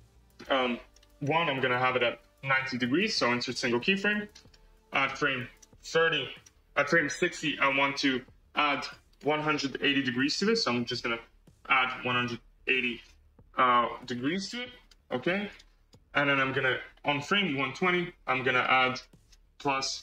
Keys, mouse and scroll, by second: 1.8-4.3 right drag, 5.7-8.1 drag, 8.7-11.2 drag, 15.4-17.3 right drag, 17.3-20.0 drag.